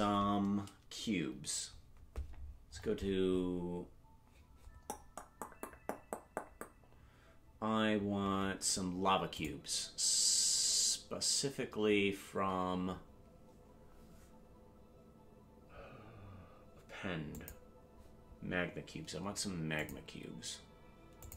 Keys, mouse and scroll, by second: 2.7-3.5 scroll down 19, 9.3-17.6 drag.